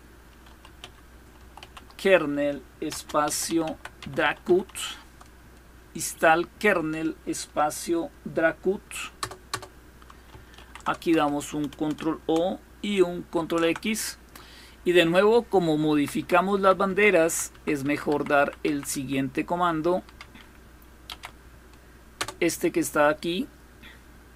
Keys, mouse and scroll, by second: 0.0-4.6 typing, 8.9 Return, 9.2 Return, 10.2 ctrl+o, 10.8 Return, 13.0 ctrl+x, 15.6 Up, 15.9 Up, 16.2 Up, 16.5 Up, 16.8 Up, 17.1 Up, 17.4 Up, 17.6 Up, 17.9 Up, 18.2 Up, 18.5 Up, 19.8 Down, 20.7 Up, 21.7 Return.